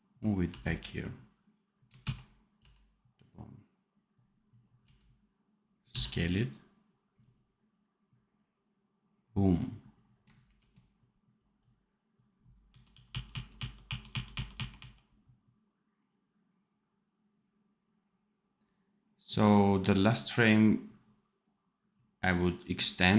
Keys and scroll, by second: 0.4 v, 2.0 ctrl+z, 2.5 v, 4.8 x, 5.8 v, 10.4 ctrl+b, 12.7 r, 13.3 r, 14.1 r, 14.7 r.